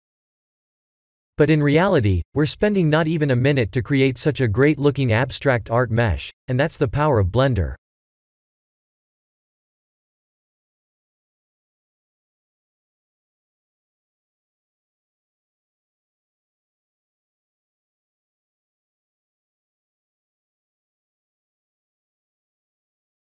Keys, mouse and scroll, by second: 3.0-5.0 drag, 5.2-7.0 drag, 7.8-10.1 drag, 10.8-13.0 drag, 14.4 middle click, 14.6-16.2 middle drag, 17.3-20.0 drag, 20.4-23.0 drag.